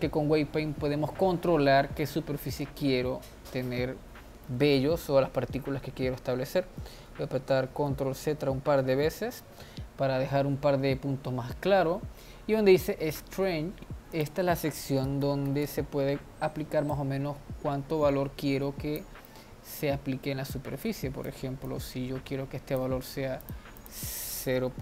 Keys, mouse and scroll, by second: 3.6-7.3 middle drag, 7.3 ctrl+z, 7.7 ctrl+z, 8.1 ctrl+z, 8.4 ctrl+z, 14.2-19.3 drag, 19.3-20.6 middle drag, 20.6-23.6 drag, 23.8-24.8 drag.